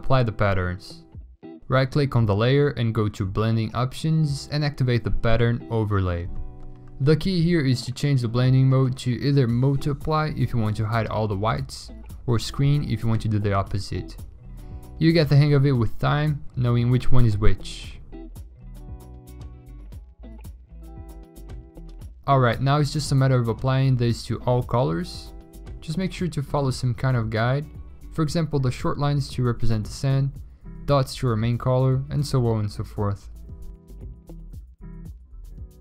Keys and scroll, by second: 33.3-35.8 typing.